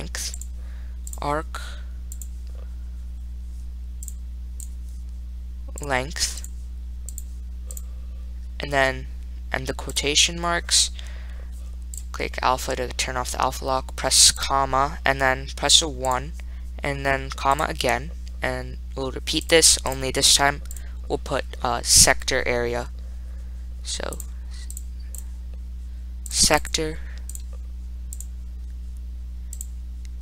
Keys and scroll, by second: 0.7 ×, 2.4 0, 4.3 ), 7.4 4, 8.0 ^, 9.8-10.6 typing, 12.2-12.9 typing, 14.6 ,, 16.3 1, 17.6-18.4 typing, 26.5 4, 26.9 7, 27.6 *, 28.4 0.